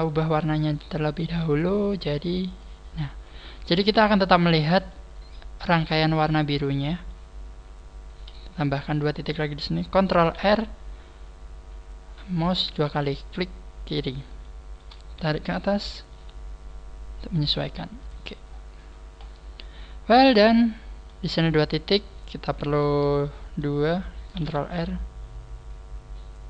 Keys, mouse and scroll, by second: 1.8 shift+right click, 2.6 click, 3.2 middle click, 5.0 middle click, 6.3 middle click, 13.1 click, 14.4 shift+middle click, 16.0 g, 18.1 click, 18.4 scroll down 2, 19.8 scroll down 1, 20.2 middle click.